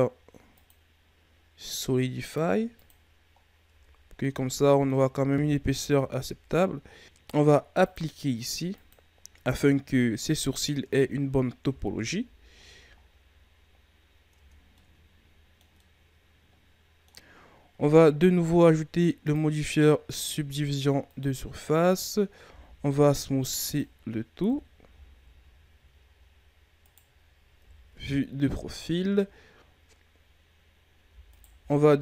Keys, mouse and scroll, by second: 0.5-3.3 drag, 3.3-3.6 scroll down 1, 3.6 Tab, 4.1-5.3 middle drag, 5.3-6.6 scroll up 1, 6.8-7.4 scroll down 2, 7.8-9.7 drag, 9.7 scroll down 3, 9.9 middle click, 10.8 Tab, 11.6 KP_3, 12.6-12.9 scroll down 3, 12.9-13.5 scroll up 3, 14.2 Tab, 14.7-18.8 middle drag, 19.2-22.4 drag, 22.4 w, 24.4 KP_1, 24.8 a, 25.3-26.1 scroll down 7, 26.1-26.8 scroll up 5, 26.8 right click, 27.5 KP_3, 27.8 Tab, 28.6-29.5 scroll up 2, 31.3 alt+right click, 31.6-32.0 middle drag.